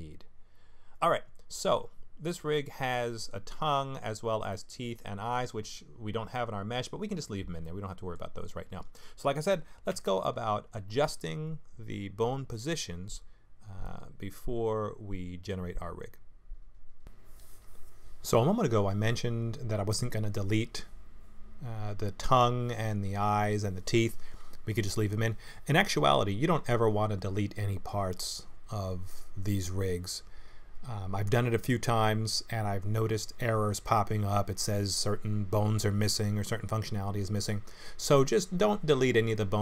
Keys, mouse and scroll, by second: 4.5 middle click, 7.6 middle click, 9.9 Tab, 13.8 middle click, 17.2 KP_1, 17.8 click, 18.7 click, 19.3 g, 20.7 middle click, 22.4 middle click, 23.2 click, 24.1 l, 24.9 KP_1, 26.1 l, 26.8 g, 29.0 click, 30.1 g, 32.0 shift+click, 32.9 shift+click, 33.3 shift+click, 33.7 shift+click, 34.0 shift+click, 34.5 shift+click, 35.0 middle click, 35.5 shift+click, 36.2 KP_1, 37.1 g, 39.4 KP_3.